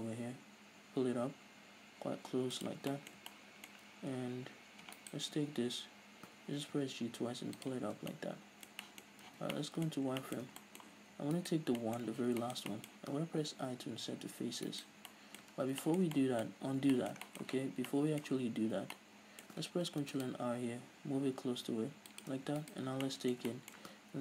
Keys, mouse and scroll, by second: 2.9 click, 3.0-5.0 middle drag, 4.1-4.9 scroll down 2, 4.9 scroll down 1, 5.0 alt+right click, 6.8 g, 7.9 scroll down 2, 8.0 Tab, 8.1-11.4 middle drag, 9.3 z, 9.9-10.2 scroll up 2, 10.5 Tab, 11.4 alt+right click, 11.8-14.8 middle drag, 12.1 z, 14.8 right click, 15.1-17.3 middle drag, 15.6 ctrl+z, 16.6-17.0 scroll up 2, 17.6 z, 17.9 middle click, 18.3 a, 18.6-19.0 scroll up 1, 19.0 middle click, 19.9 ctrl+r, 22.3 shift+click, 22.6 alt+right click, 22.9 scroll down 1, 23.1-24.2 middle drag.